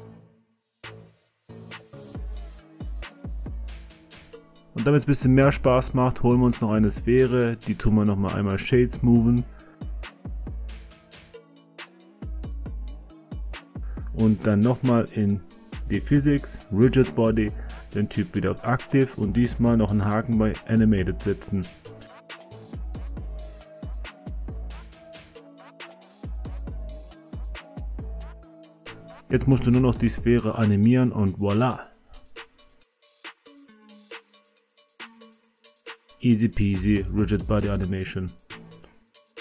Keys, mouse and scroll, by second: 0.5 space, 1.5 space, 2.3 click, 3.7 a, 4.0 a, 8.8-10.2 drag, 10.8 click, 12.4 right click, 15.4 click, 20.1 click, 23.2 i, 25.7 click, 27.7-28.8 drag, 29.2 i, 31.4-33.5 drag, 34.8 click, 36.7 space.